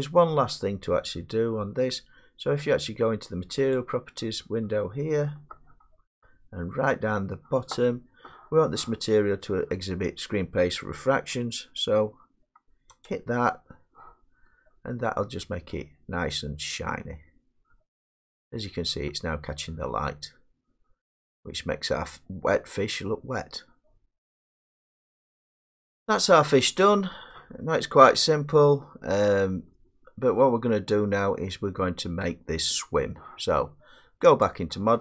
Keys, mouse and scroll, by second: 0.0 middle click, 0.1 middle click, 0.3-1.2 scroll, 3.8 click, 4.6-6.6 scroll, 7.1-7.9 scroll, 13.2 click, 15.1-18.2 drag, 23.4-24.5 middle drag, 24.5 scroll, 25.7 scroll, 27.3-27.9 scroll, 28.0 middle click, 30.4 middle click, 30.7 middle click, 30.8 middle click, 31.6 scroll, 32.2 scroll, 34.5 click.